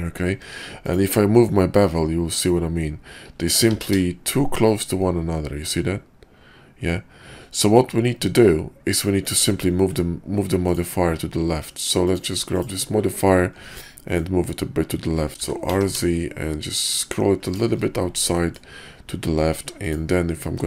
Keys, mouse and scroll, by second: 0.3 q, 10.5 click, 11.0 q, 13.8 middle click, 15.4 r, 18.4 middle click, 20.3 q.